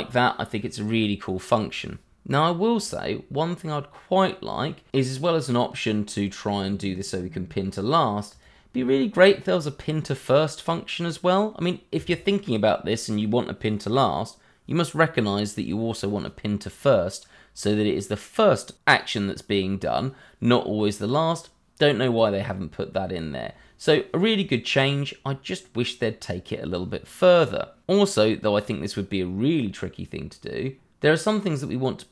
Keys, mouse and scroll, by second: 3.5 scroll down 1, 3.9 middle click, 8.3 click.